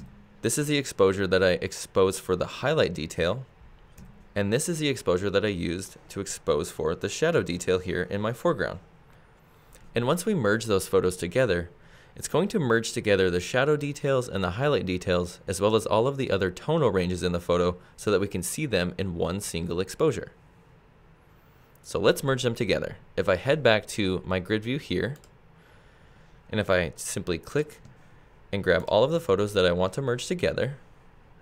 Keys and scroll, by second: 0.0 Right, 4.0 Right.